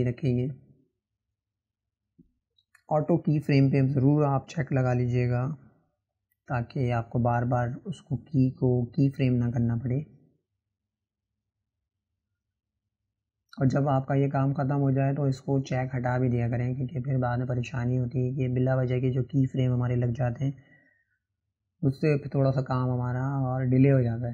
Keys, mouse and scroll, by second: 1.7 click, 4.4-6.3 right drag, 6.3-8.3 drag, 9.2 click, 11.1-13.4 drag, 13.4-13.8 scroll down 1, 13.8-15.5 shift+middle drag, 15.5 click, 17.5-19.4 drag.